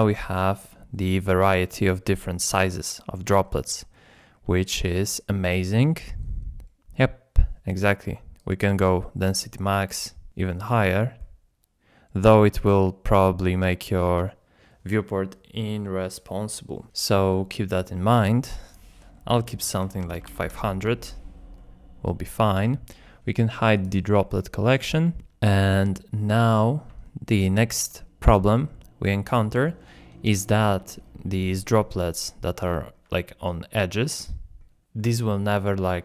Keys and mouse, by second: 0.0 middle click, 0.1 KP_1, 1.0-1.3 shift+drag, 3.9-4.3 shift+drag, 5.1-5.4 middle drag, 5.7-6.2 middle drag, 6.9 middle click, 8.4-9.9 drag, 10.8 click, 11.3-12.0 middle drag, 12.8 middle click, 17.1-17.5 middle drag, 18.7-20.6 drag, 20.2 KP_0, 21.6-22.3 middle drag, 23.8 click, 25.0-26.0 middle drag, 26.2-26.7 shift+drag, 27.1 shift+middle click, 29.8-30.3 middle drag, 30.5 shift+middle drag, 31.3-31.7 middle drag, 32.0-32.5 shift+middle drag, 32.7 ctrl+middle click, 33.1 middle click, 33.8 middle click, 34.3 ctrl+middle click.